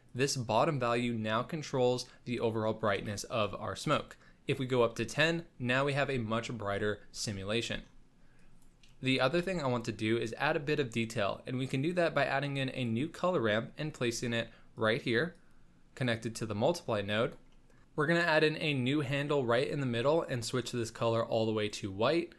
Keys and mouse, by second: 0.0-3.9 drag, 5.2 click, 8.3 click, 9.1 middle click, 9.3 shift+a, 15.3 click, 16.5 middle click, 17.2 click, 17.6 middle click, 18.6 click.